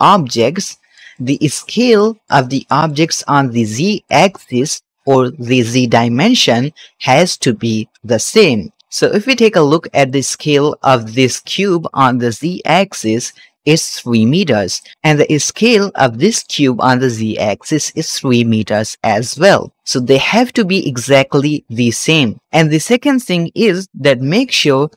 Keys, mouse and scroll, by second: 0.6 middle click, 1.1 shift+middle click, 1.3-1.7 scroll up 2, 1.8-2.2 shift+middle drag, 2.3 shift+middle click, 2.8 shift+middle click, 3.9 shift+middle click, 8.8 ctrl+z, 9.8 click, 11.8 n, 13.6-14.8 drag, 15.9 click, 17.8-19.7 drag, 24.5 shift+click.